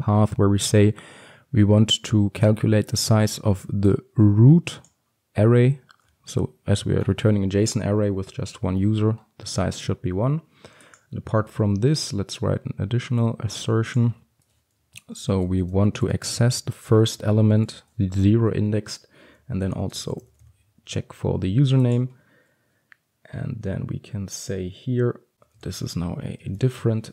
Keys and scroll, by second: 11.6 ctrl+d.